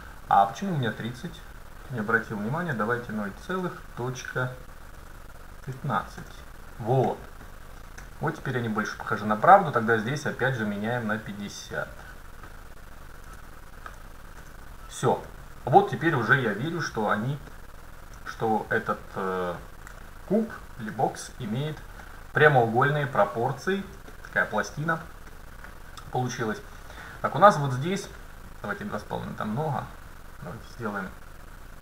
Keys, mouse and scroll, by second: 7.1-7.6 scroll up 1, 7.6-8.3 scroll down 1, 8.1 KP_7, 9.5-11.3 drag, 15.3-16.1 scroll up 1, 16.1-18.0 middle drag, 18.0 scroll up 1, 18.3 middle click, 18.5 middle click, 22.9 scroll up 1, 23.1-24.2 middle drag, 26.8 middle click, 29.0-30.9 drag.